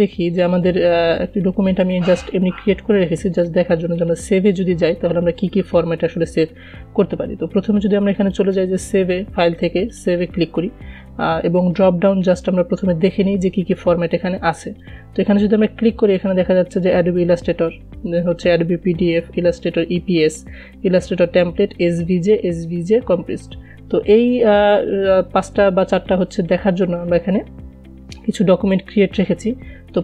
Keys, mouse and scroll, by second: 8.5 click, 15.2 click, 25.2 click.